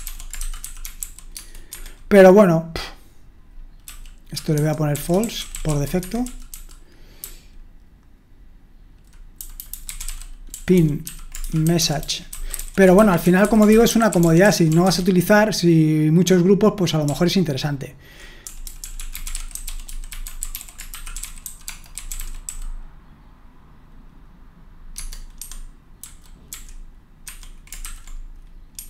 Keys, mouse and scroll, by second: 0.0-1.5 typing, 1.7 Escape, 4.7-8.3 typing, 9.6-15.2 typing, 17.7-22.9 typing, 25.4 Escape, 26.0-26.5 typing, 27.2 Escape, 27.8 shift+-, 28.7 Escape.